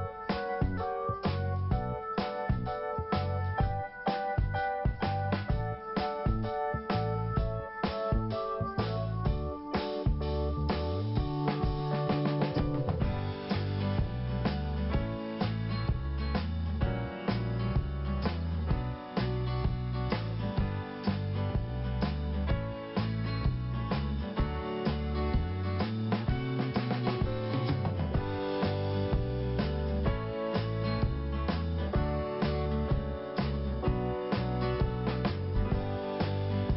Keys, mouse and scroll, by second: 0.5 click, 2.7 click, 4.1 scroll down 1, 5.6 scroll down 2, 6.9 scroll down 1, 10.1 click, 10.3 click, 11.3 click, 11.4 click, 12.8 click, 12.9 click, 14.1 click, 14.2 click, 15.1 click, 15.2 click, 16.8 click, 18.1 scroll down 2, 18.2 click, 19.5 scroll up 1, 20.0 scroll up 1, 22.0 click, 26.6 click, 26.7 click, 29.0 click, 31.2 click, 31.2 click, 34.3 click.